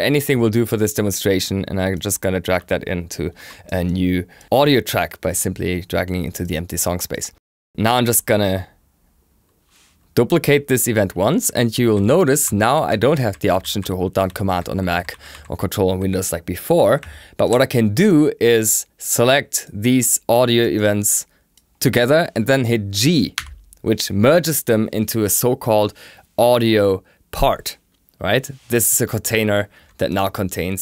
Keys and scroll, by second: 23.3 g.